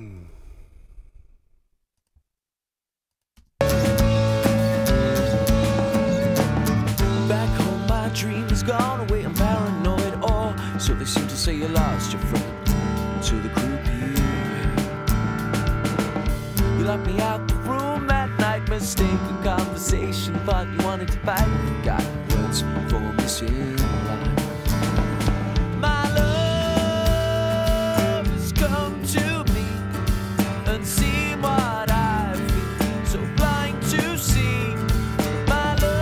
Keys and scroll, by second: 3.3 space.